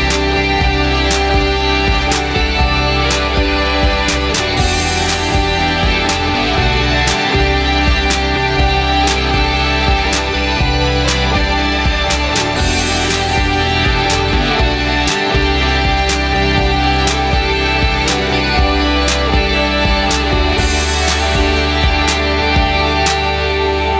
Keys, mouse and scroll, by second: 7.9 click, 10.3 click, 12.0-14.6 drag, 15.2 click.